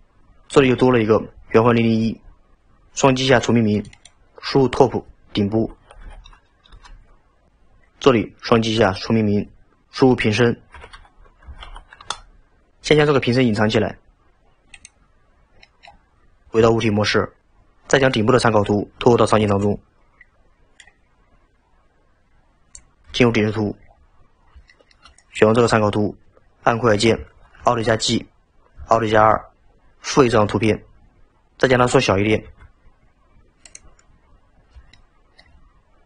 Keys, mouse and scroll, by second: 3.7-7.0 drag, 8.6-9.8 drag, 14.8 click, 15.3-15.6 scroll down 1, 15.6 middle click, 16.5 Tab, 23.0 KP_7, 24.0-24.7 scroll down 7, 24.7-25.2 shift+middle drag, 25.2 click, 27.6 alt+g, 29.1 alt+r, 34.3-34.9 scroll up 2, 34.9-35.9 shift+middle drag, 35.9-36.0 scroll up 2.